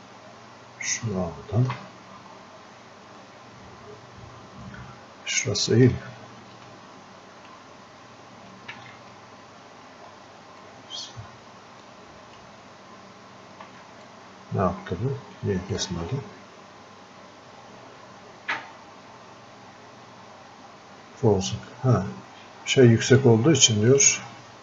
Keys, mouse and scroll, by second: 3.2-6.4 ctrl+shift+drag, 6.4 ctrl+shift+space, 10.6-14.1 ctrl+shift+drag, 14.1-22.3 drag, 22.6 click, 24.0 click.